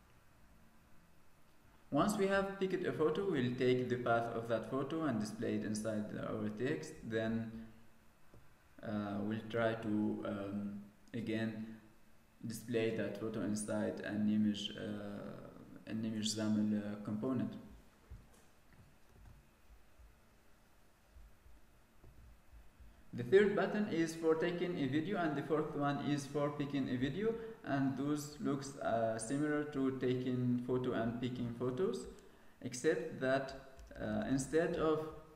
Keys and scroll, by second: 19.0 ctrl+s.